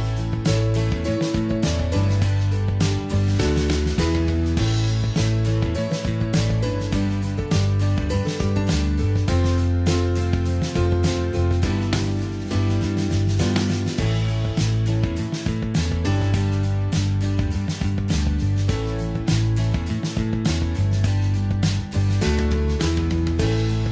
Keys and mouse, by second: 0.0 ctrl+s, 1.5 n, 20.0 middle click.